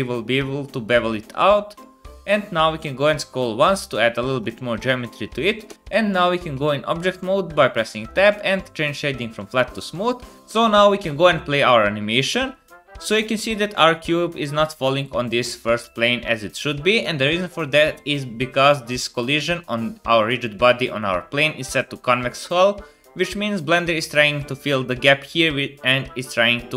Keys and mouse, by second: 5.7 Tab, 6.5 Tab, 10.4-13.5 drag, 10.4-13.5 middle drag, 10.4-13.5 right drag, 11.1 space, 14.6 space.